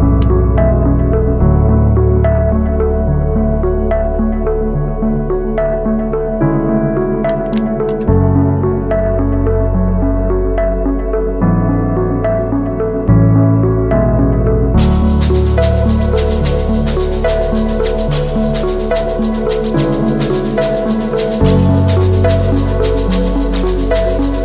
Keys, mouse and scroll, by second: 7.6 ctrl+t, 8.8 alt+shift+click, 13.1 alt+shift+click, 14.6 Return, 15.0 Down, 15.8 Left, 15.8 Down, 16.5 Up, 16.5 Left, 17.1 Right, 17.4 Right, 18.4 Right, 18.6 Up, 19.1 Left, 19.6 Up, 20.3 ctrl+t, 21.3 alt+shift+click, 23.8 Return, 24.3 Down.